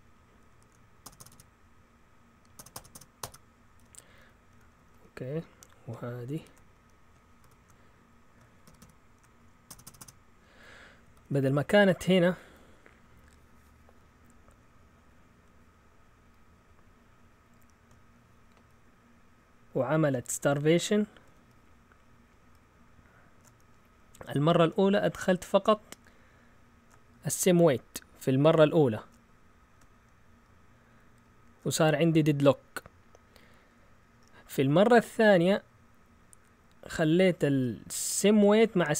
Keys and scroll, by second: 1.0 typing, 2.5-5.3 typing, 6.3-7.4 typing, 8.6-10.0 typing, 11.0 typing, 12.6 Down.